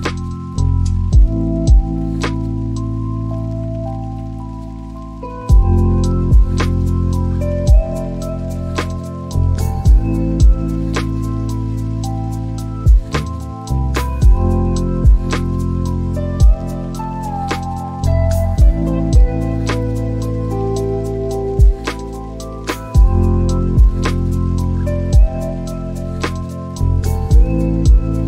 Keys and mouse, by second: 2.7 s, 4.7 Return, 6.9 ctrl+a, 12.8 s, 13.4 z, 16.7 ctrl+click, 21.5 Tab, 24.7 click, 26.2 click.